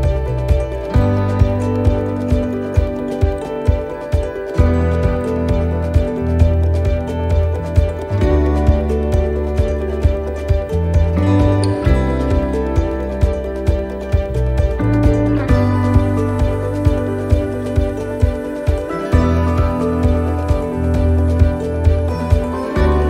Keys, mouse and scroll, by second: 5.5 click, 6.5 middle click, 9.9-10.7 scroll up 2, 10.3 middle click, 11.6 shift+middle click, 12.3 middle click, 13.0 scroll down 1, 13.5 shift+middle click, 14.1 middle click, 14.7 shift+middle click, 15.3 middle click, 15.7-16.1 scroll down 5, 16.2 shift+middle click, 18.6 shift+middle click, 20.0 right click, 20.8 shift+right click.